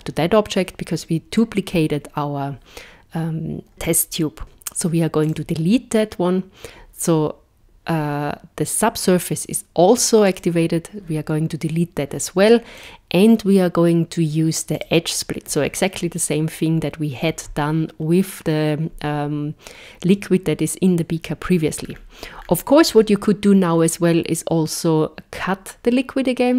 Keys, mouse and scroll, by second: 5.2 click, 10.3 click, 12.8 click, 21.8-26.0 scroll down 7.